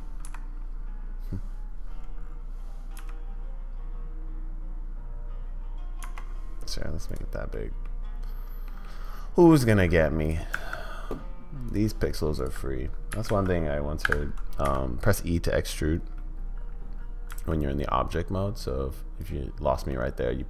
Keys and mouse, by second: 7.5 middle drag, 8.7 middle click, 9.4 middle drag, 10.2 click, 10.7 Tab, 11.7 click, 13.1 g, 14.6 e, 19.9-20.4 middle drag.